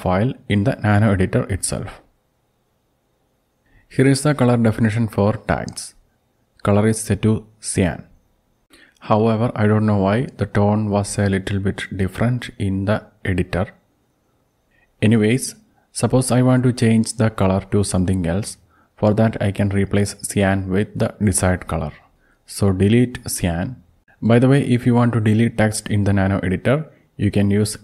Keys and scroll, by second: 0.0-3.2 typing, 3.4 Tab, 15.1 ctrl+Down, 15.2 ctrl+Down, 15.4 ctrl+Down, 16.0 ctrl+Down, 16.6 ctrl+Up, 17.0 Down, 18.0 ctrl+Right, 21.2 Delete, 21.5 Delete, 22.0 Delete, 22.3 Delete, 24.9 alt+u, 26.0 Right, 26.2 Right, 26.4 Right, 26.6 Right, 27.5 BackSpace, 27.7 BackSpace.